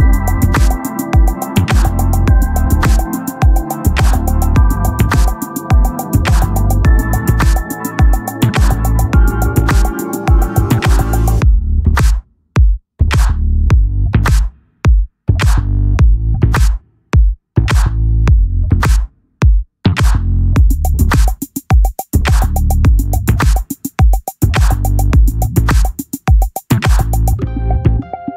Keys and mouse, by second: 2.6 click, 11.5 click, 13.5 click, 17.9 click, 19.8 click, 22.3 click, 24.3 click.